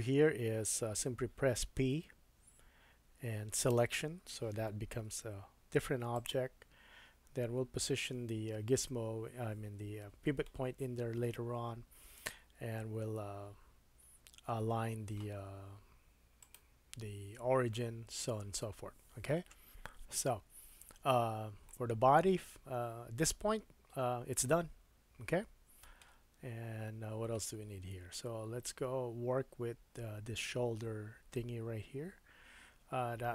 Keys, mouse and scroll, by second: 1.9 p, 5.1 Tab, 6.1 click, 6.3-8.1 middle drag, 10.4 super+middle click, 16.4 click, 21.3-21.7 scroll down 1, 21.8 middle click, 22.6 middle click, 27.9 KP_1.